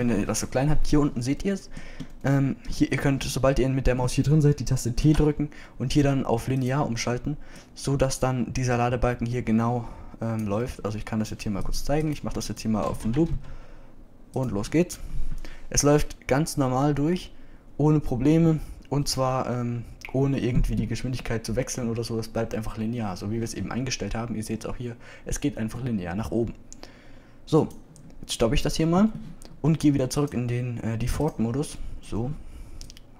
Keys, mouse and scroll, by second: 7.7 t, 8.8 click, 28.6 click, 29.9 click.